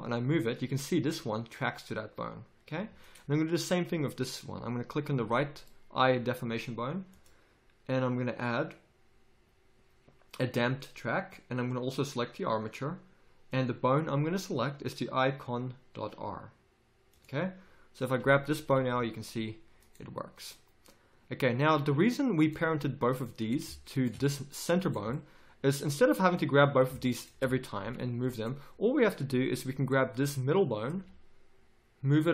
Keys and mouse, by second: 4.1-5.7 drag, 7.1-18.1 drag, 18.7 g, 20.3 click, 22.4 right click, 27.8 g, 30.2 click, 30.9 g.